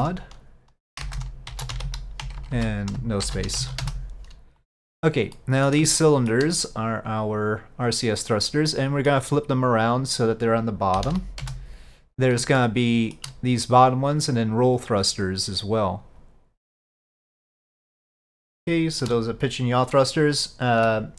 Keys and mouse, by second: 2.5 BackSpace, 5.4 middle click, 6.1 shift+middle click, 7.6 click, 8.9 middle click, 10.3-12.2 drag, 12.7-13.3 shift+middle drag, 14.8-16.1 drag, 17.9-18.5 middle drag, 18.8-19.1 shift+middle drag.